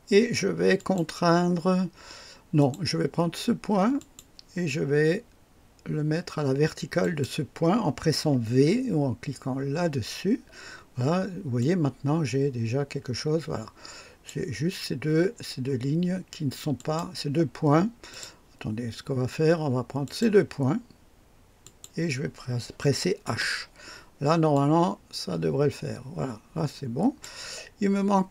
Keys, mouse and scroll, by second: 0.7 click, 2.5 click, 3.9 click, 7.0 click, 9.7 v, 9.7 v, 11.5-14.4 drag, 16.7 click, 18.0 click, 20.0 click, 21.6 click, 23.2 h, 23.3 h, 24.5-27.4 drag.